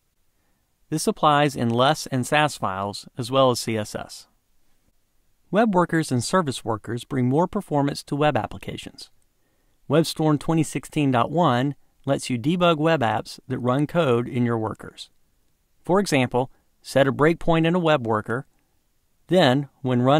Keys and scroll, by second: 19.8 ctrl+shift+d.